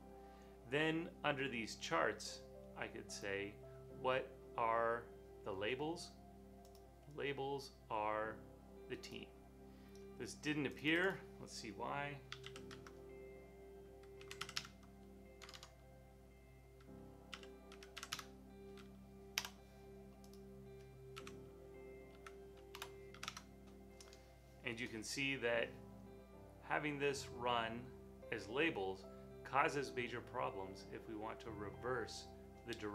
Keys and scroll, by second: 12.2-16.0 typing, 17.1-19.3 typing, 21.2 Left, 22.0 Left, 22.5-23.1 typing, 23.2 Home.